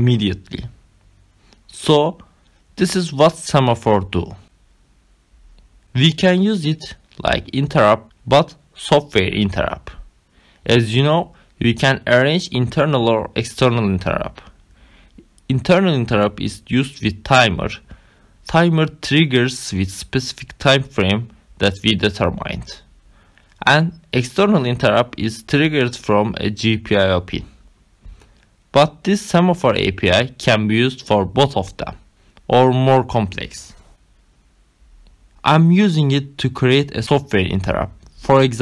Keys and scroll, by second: 7.4 ctrl+c.